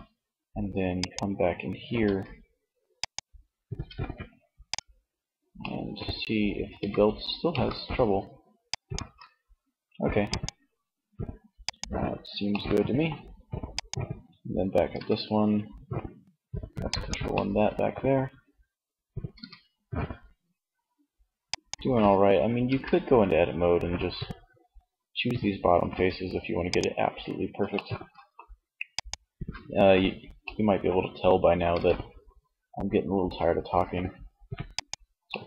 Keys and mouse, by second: 0.0 click, 1.2 Tab, 2.9 Tab, 4.8 middle click, 5.6 r, 7.9 click, 8.3 ctrl+z, 13.0 click, 14.1 r, 14.8 click, 16.2 click, 16.5-17.7 middle drag, 18.4 r, 20.7-21.7 drag, 21.2 ctrl+z, 21.7 Tab, 25.1 Tab, 26.7 middle click, 27.9 middle click, 29.5 middle click, 31.0 r, 33.9 click, 34.3-35.4 middle drag.